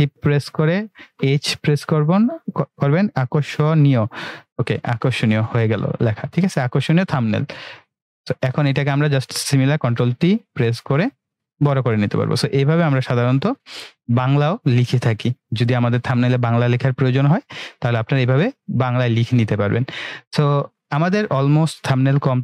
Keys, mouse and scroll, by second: 0.2-1.2 typing, 7.2 click, 9.8 ctrl+t, 10.8-11.8 drag.